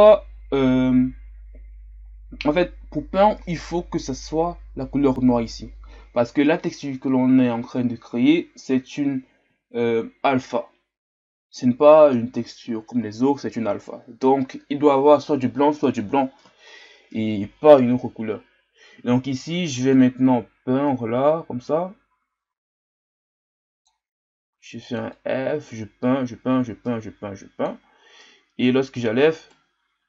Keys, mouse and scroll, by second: 0.0-5.1 scroll down 6, 5.1-19.9 scroll down 1, 19.9-22.9 drag, 25.2-28.2 drag, 28.2-30.0 right drag.